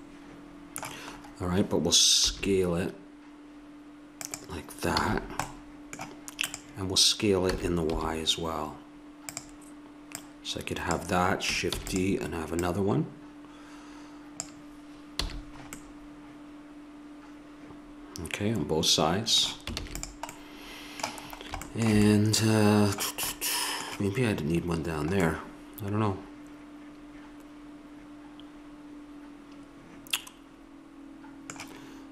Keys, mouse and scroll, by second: 1.2 middle click, 2.2 s, 4.9 a, 5.2 middle click, 6.6-8.2 drag, 7.6 s, 10.2-12.4 drag, 11.7 shift+d, 12.6-14.4 drag, 15.2 a, 15.4 click, 19.8 ctrl+s, 25.4-27.0 middle drag.